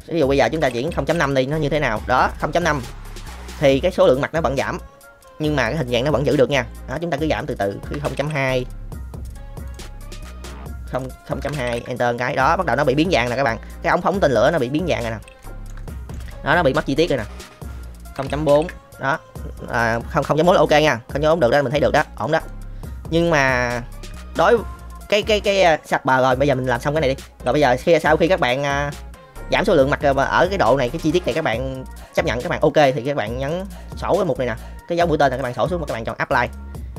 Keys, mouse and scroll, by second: 1.7-2.0 middle drag, 2.8-3.5 middle drag, 5.2-6.8 middle drag, 7.8 KP_0, 7.9 KP_Decimal, 8.1 KP_2, 8.2 KP_Enter, 10.9 click, 12.2 middle click, 13.1 shift+middle drag, 13.6-14.1 middle drag, 14.6 middle click, 15.4 shift+middle drag, 15.8-16.1 middle drag, 16.7 middle click, 17.6-18.6 drag, 19.3-19.9 middle drag, 20.2-22.2 middle drag, 22.4-23.7 middle drag, 24.0-25.1 middle drag, 26.4-26.7 middle drag, 27.5-27.9 shift+middle drag, 30.4-30.8 middle drag, 33.4 click, 35.3-36.5 drag.